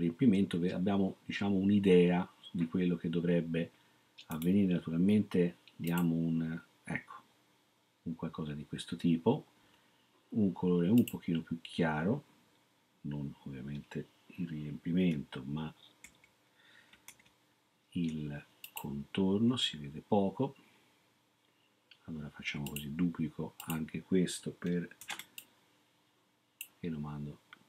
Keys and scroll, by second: 16.0 super+z, 17.2 ctrl+z, 25.0 ctrl+d.